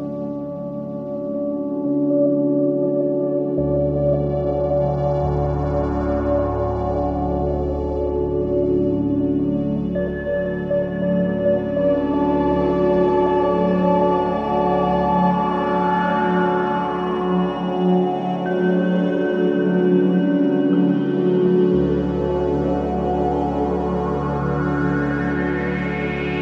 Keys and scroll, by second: 11.6 ], 21.7 Escape, 21.9 ctrl+z, 24.6 ].